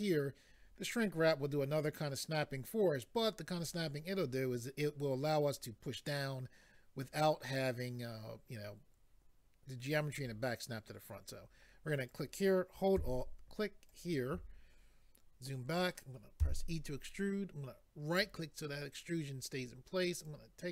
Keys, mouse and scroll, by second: 12.1 click, 13.9 alt+click, 15.0 scroll down 1, 16.4 e, 18.1 right click, 20.3 click.